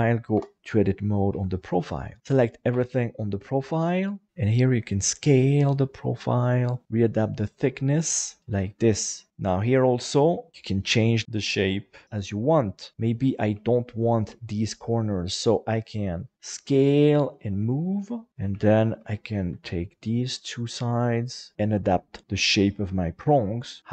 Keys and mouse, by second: 0.3 Tab, 1.3 KP_7, 2.7 a, 4.3 s, 7.8 click, 13.9 shift+right click, 15.8 s, 16.4 click, 17.6 g, 18.7 shift+right click, 19.5 s, 22.2-23.9 middle drag.